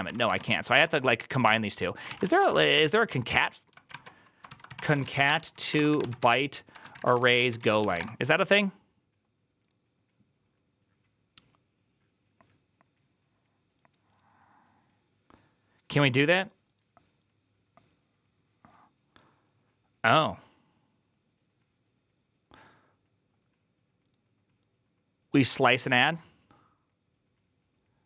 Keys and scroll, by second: 0.0-0.8 typing, 1.3 ctrl+c, 1.9-3.1 typing, 4.3-8.3 typing.